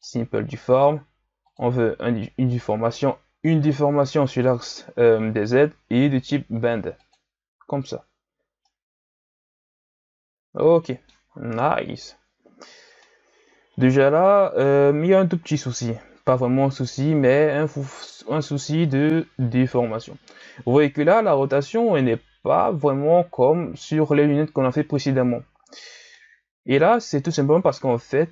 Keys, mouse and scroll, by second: 1.4 click, 2.9-6.0 middle drag, 7.0 click, 8.7-11.5 middle drag, 11.5 KP_1, 13.0-16.0 middle drag, 26.1-28.3 middle drag.